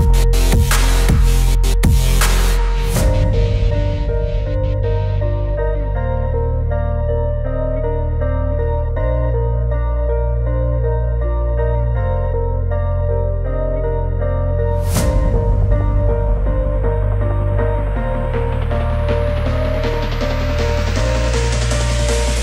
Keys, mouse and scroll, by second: 3.1 space, 3.4 click, 6.0 click, 9.0-13.8 drag, 13.8 scroll up 1, 15.4-22.2 drag, 22.2 space.